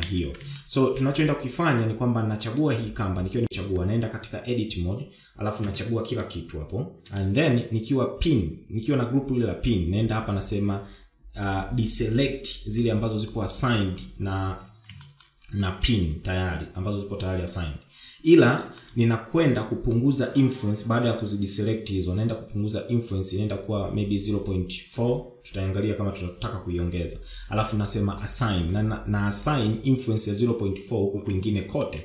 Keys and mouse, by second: 0.2-0.8 shift+middle drag, 3.3 Tab, 5.4 a, 7.0 shift+middle click, 13.1 click, 14.8 shift+middle click, 18.2 shift+middle click, 20.3-24.7 drag, 27.9 click, 31.1 shift+middle click.